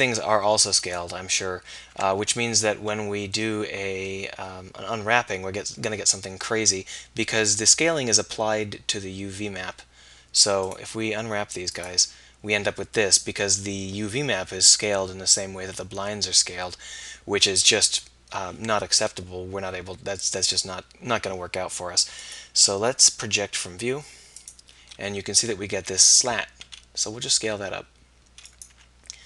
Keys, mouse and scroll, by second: 2.1 Tab, 2.5-3.8 middle drag, 17.9 KP_1, 22.3 middle click, 26.6 s, 28.8 g.